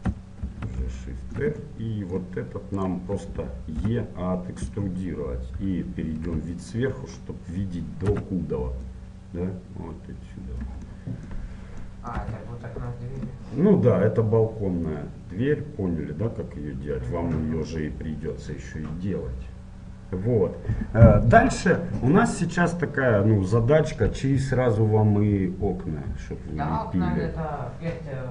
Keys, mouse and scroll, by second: 0.5 shift+r, 1.1-2.9 middle drag, 2.9-4.9 right drag, 3.9 e, 6.3 KP_7, 7.3-9.0 middle drag, 8.2 z, 9.0 click, 10.4 click, 10.9-15.7 middle drag, 12.4 z, 17.4-20.0 middle drag.